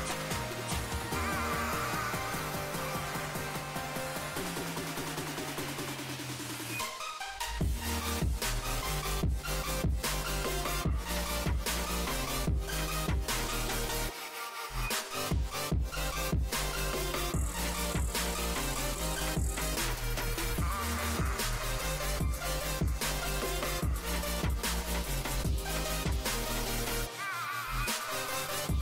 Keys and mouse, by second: 0.1 Tab, 1.4 ctrl+1, 3.3 ctrl+2, 5.8 Tab, 7.0 z, 8.2 s, 9.4 z, 11.4 s, 12.8 s, 15.6 ctrl+r, 19.4 Tab, 19.8 Tab, 20.6 ctrl+r, 21.7 Tab, 22.8 a, 24.5 Tab, 25.4 z, 25.6 a, 25.8 a, 27.9 z, 28.5 z.